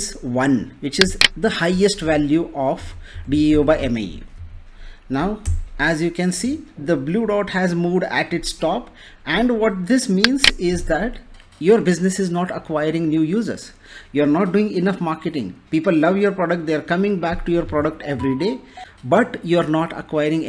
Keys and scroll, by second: 2.7 Left, 3.4 shift+Left, 5.1 0, 5.4 Return.